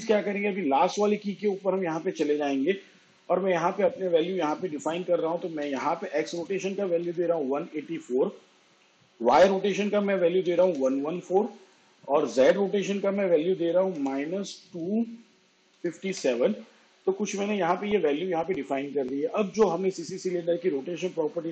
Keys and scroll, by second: 3.8 1, 4.6 8, 5.4 4, 8.9 1, 9.4 4, 12.5 -, 13.2 2, 13.9 5, 14.7 7.